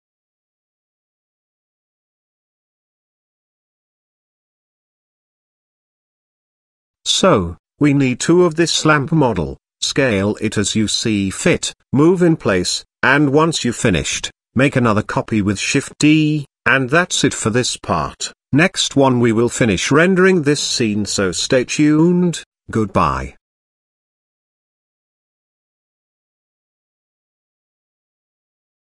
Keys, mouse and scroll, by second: 1.8 middle click, 2.5 Tab, 3.0 middle click, 4.2 s, 5.0 z, 5.5 middle click, 6.0 s, 8.1 g, 9.7 KP_0, 10.6 f, 10.9 g, 13.1 s, 14.4 KP_Decimal, 15.2 g, 16.5 middle click, 17.4 shift+d, 19.1 s, 20.2 shift+middle click, 21.0 g, 22.4 g, 23.7-24.2 middle drag, 24.5 g, 26.3-27.2 middle drag, 27.5 KP_0.